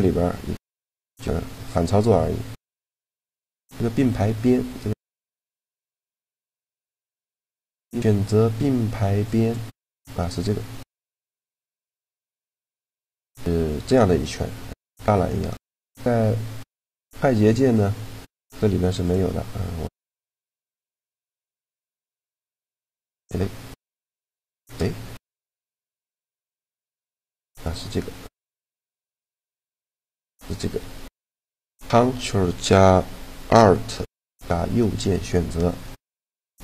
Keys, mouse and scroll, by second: 4.9 right click, 5.4-7.7 middle drag, 7.7-9.5 drag, 10.1-13.6 middle drag, 15.3-16.9 middle drag, 18.9-20.7 drag, 21.3 a, 22.5-25.8 right drag, 26.8-28.4 right drag, 28.4-29.9 middle drag, 29.9-31.8 right drag, 36.2-36.6 right drag.